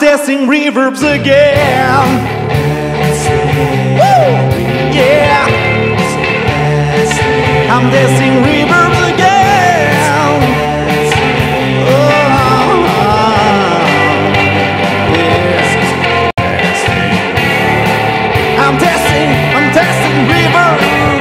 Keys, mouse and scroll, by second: 5.8 ctrl+scroll down 2, 10.0 click, 11.9 click, 18.4 middle click, 19.4 click.